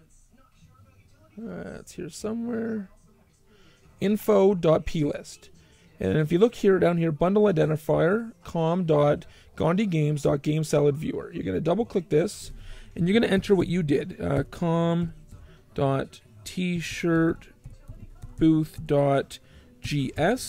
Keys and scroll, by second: 12.8-15.2 typing, 16.3-20.0 typing.